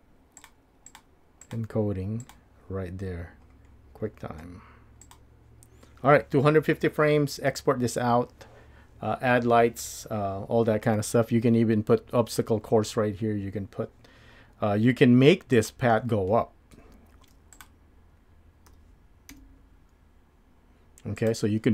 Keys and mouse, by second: 0.4 click, 0.9 click, 1.4 click, 2.2-5.1 drag, 18.5 Tab, 18.7 g.